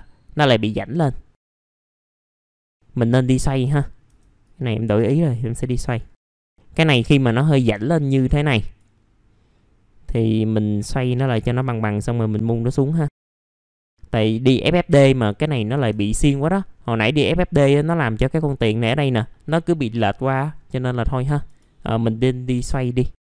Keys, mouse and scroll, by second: 0.7 middle click, 0.8-1.5 scroll down 1, 1.5 click, 2.0 w, 2.6 click, 3.6 typing, 4.4-6.1 drag, 6.1 scroll up 1, 6.4 click, 6.5 middle click, 8.0 click, 9.0-10.1 scroll up 1, 10.1 click, 11.6-13.1 drag, 13.1 scroll up 1, 13.2 e, 13.4-14.9 drag, 14.9-15.7 scroll down 2, 15.3 middle click, 16.1 middle click, 16.4-20.5 scroll up 1, 20.5-20.9 scroll down 1, 20.9 middle click, 21.5 F4, 22.1 middle click, 22.6 alt+middle click.